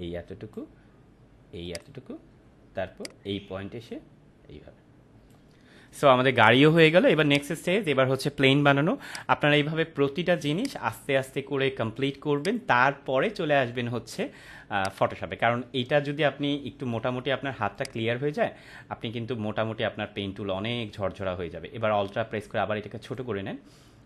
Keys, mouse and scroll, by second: 3.3-5.5 drag, 14.7 click, 17.7-23.4 drag.